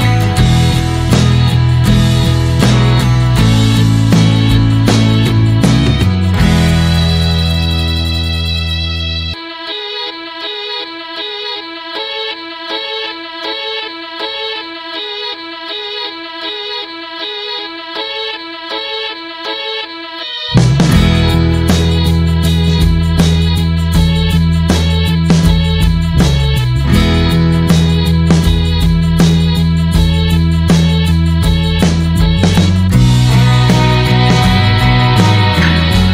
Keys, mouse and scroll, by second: 4.0 r, 7.0 click, 11.6 scroll up 2, 12.0 click, 16.6 click, 21.3 scroll down 1, 21.5 middle click, 22.5 click, 22.7 scroll down 1, 22.9 middle click, 23.2-25.7 drag, 30.3 alt+middle click, 31.3 middle click, 31.6 scroll up 1, 31.9 click, 33.7 click, 35.4 click, 35.7-36.0 scroll down 2.